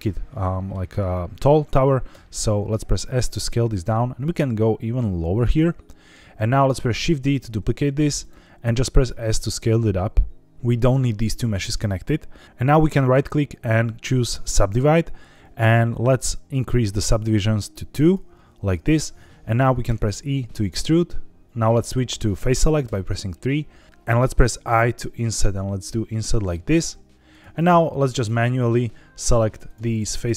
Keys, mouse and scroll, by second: 0.3 middle click, 1.5 scroll up 1, 2.0 s, 3.6 click, 4.1 g, 4.2 z, 5.4 click, 5.8 middle click, 7.0 shift+d, 8.1 right click, 8.6 s, 10.7 click, 12.4 ctrl+z, 12.9-14.4 right drag, 16.0 click, 16.9 click, 17.9 click, 19.8 e, 21.4 click, 22.9 3, 24.6 i, 27.2 click, 28.1 click, 28.5 shift+click, 29.1 shift+click, 29.6 shift+click, 30.1 shift+click.